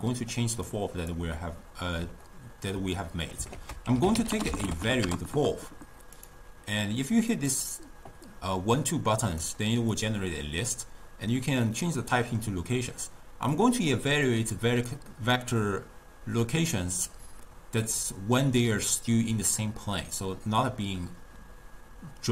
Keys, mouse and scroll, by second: 0.7-1.4 drag, 1.4-3.6 middle drag, 3.6 ctrl+a, 7.8 click, 9.3-12.0 drag, 12.0-13.6 middle drag, 13.6 click.